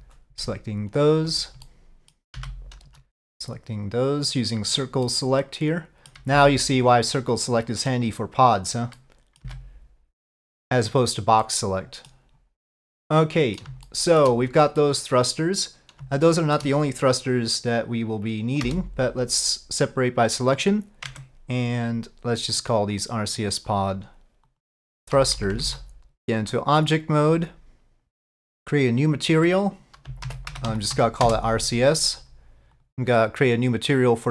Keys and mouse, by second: 1.7 middle click, 5.1-6.2 middle drag, 9.0 middle click, 9.5 c, 11.5 middle click, 12.8 middle click, 13.9 shift+middle click, 14.9 middle click, 16.3 shift+middle click, 21.1 Tab, 22.7 click, 23.4 click, 23.9-25.9 drag, 25.4 BackSpace, 25.9 Tab, 25.9 BackSpace, 28.3 click, 29.1 click, 29.2-32.0 drag, 33.8 click.